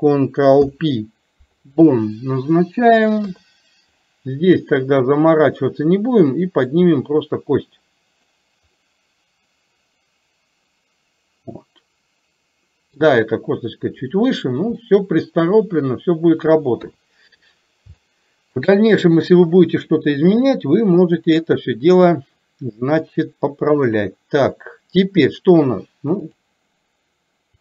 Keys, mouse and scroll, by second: 3.3 KP_3, 6.7-8.4 drag, 8.8-13.2 middle drag, 14.9-16.7 middle drag, 16.8 KP_3, 18.0 shift+middle click, 24.0 click, 26.4 click.